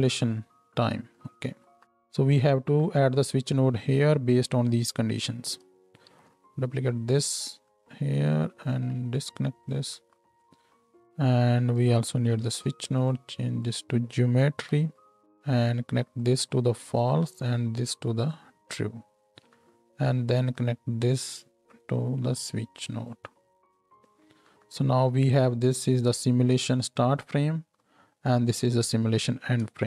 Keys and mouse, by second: 1.1 middle click, 1.2-9.1 drag, 1.4 Tab, 6.0 ctrl+shift+d, 9.1 ctrl+right click, 9.9-11.7 drag, 11.7 middle click, 11.9-13.7 shift+right drag, 12.4 shift+d, 13.7-15.2 middle drag, 29.3 click.